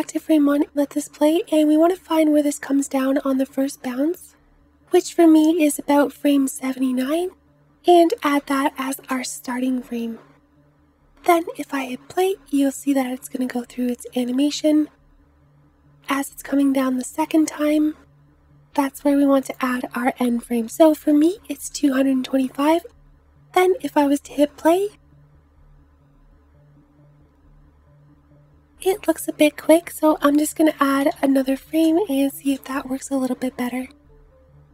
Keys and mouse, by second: 0.3 space, 3.6 space, 11.5 space, 16.2 space, 18.1 Right, 20.8 KP_2, 24.2 space, 29.6 space, 32.0 KP_2, 33.1 space.